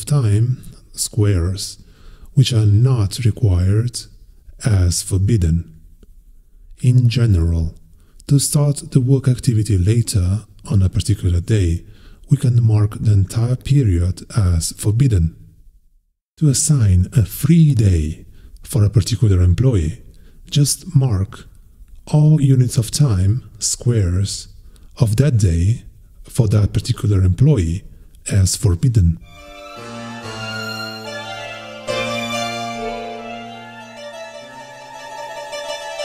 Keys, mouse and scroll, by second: 0.0-1.5 drag, 4.6 click, 6.1-7.8 drag, 8.7-10.3 drag, 10.7 click, 12.4-13.9 drag, 19.0 click, 21.4 click, 21.8-22.8 scroll up 3, 24.4 click, 24.8 scroll up 1, 25.4-25.9 scroll up 2, 26.1 scroll up 2, 28.3 scroll up 2, 30.9-31.7 scroll up 2, 34.7 click, 35.4-36.0 scroll up 4.